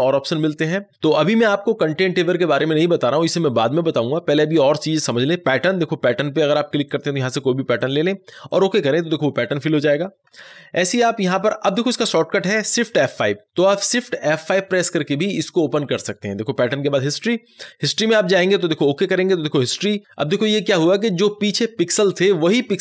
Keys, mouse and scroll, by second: 0.0 click, 5.4 click, 11.6 click, 15.8 click.